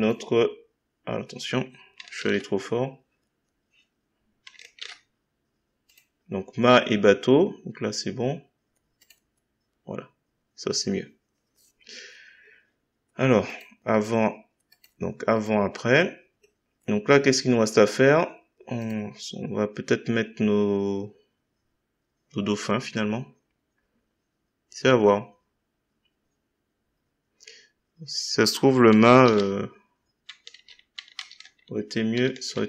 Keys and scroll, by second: 29.2 ctrl+z, 30.5 ctrl+z.